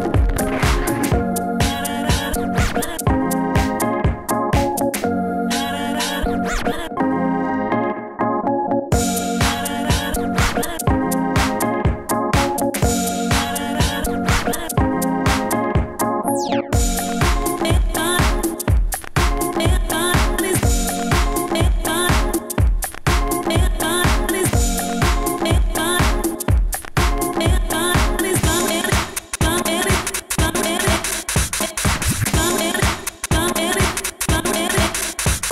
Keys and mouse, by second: 5.2 F9, 7.6 s, 7.8 f, 10.4-11.0 drag, 11.0 s, 11.4 s, 12.6 s, 12.6 f, 12.8 Tab, 13.3 Tab, 15.3 Tab, 18.4 s, 18.5 f, 19.6 f, 22.6 s, 24.0 f, 26.3 f, 26.3 s, 29.7 s, 30.5 s, 31.8 s, 32.3 Tab, 33.8 Tab, 33.8 s.